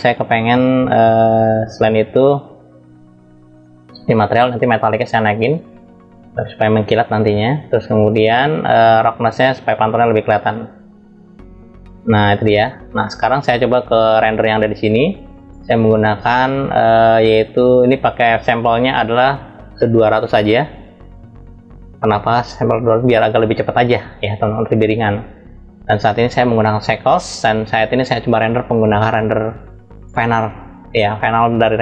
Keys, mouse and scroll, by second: 0.8 drag, 2.5 click, 3.5 scroll down 1, 5.3-8.8 drag, 5.3-6.1 scroll down 2, 9.5-13.1 drag, 14.5 click, 15.6 click, 18.3-22.0 drag, 21.3 0, 23.6-24.5 scroll up 1, 30.0 click.